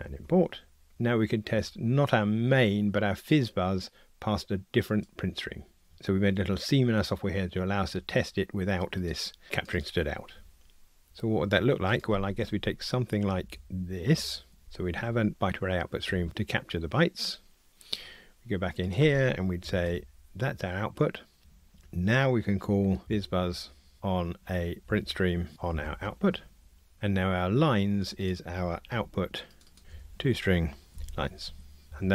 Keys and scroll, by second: 0.0 alt+Return, 14.6 super+c, 19.9 super+v, 21.4 Tab, 23.9 Return, 25.5 Return, 26.4 Tab, 28.8 super+c, 29.8 super+v, 30.9 Return, 31.9 Escape.